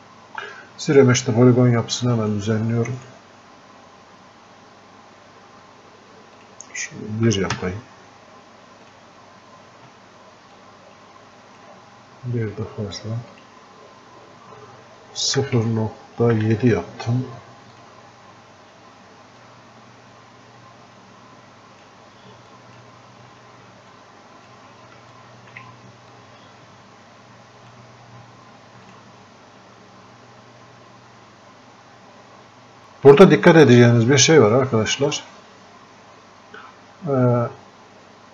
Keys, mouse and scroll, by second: 2.1 click, 6.4 click, 8.9-13.4 drag, 17.8-22.6 drag, 22.6 click, 23.4 f, 24.0 click, 25.2 alt+click, 26.2-28.9 drag.